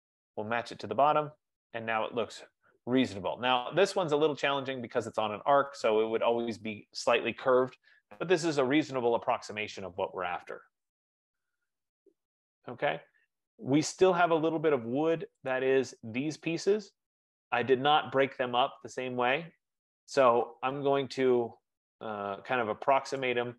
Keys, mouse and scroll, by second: 0.3 click, 1.6 click, 2.2-2.6 scroll, 4.7-5.2 scroll, 5.4 middle click, 11.3-11.6 scroll, 12.0 middle click, 12.1-12.6 scroll, 13.6-14.4 scroll, 14.7 scroll, 15.7 click, 17.2-18.6 scroll, 23.3 right click.